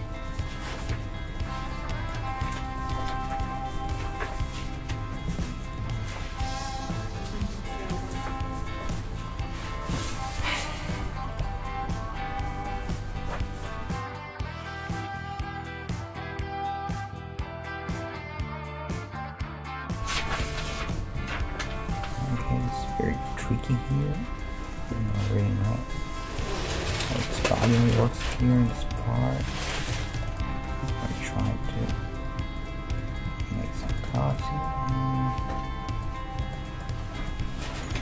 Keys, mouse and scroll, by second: 0.3-3.5 right drag, 2.0-4.6 middle drag, 3.8-8.1 right drag, 8.8 g, 13.9 \, 15.2-18.6 middle drag, 20.0 \, 20.4-22.6 middle drag, 21.2 KP_3, 22.6 right click, 23.4 g, 25.1-30.1 right drag, 25.3 g, 26.7 g, 27.5-32.1 middle drag, 29.3 g, 30.6 ctrl+Tab, 31.4-35.2 right drag, 33.8 f, 34.0-36.1 middle drag, 34.1 a, 36.6-38.0 middle drag, 37.5-38.0 right drag.